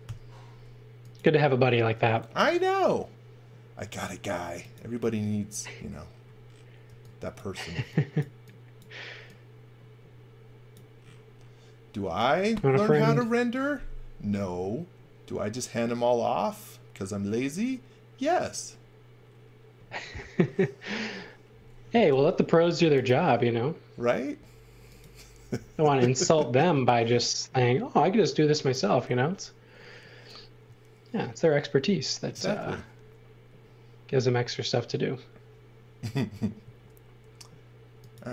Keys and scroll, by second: 0.0 i, 6.9 e, 19.7 x, 22.1 i, 25.6 e, 36.6 a.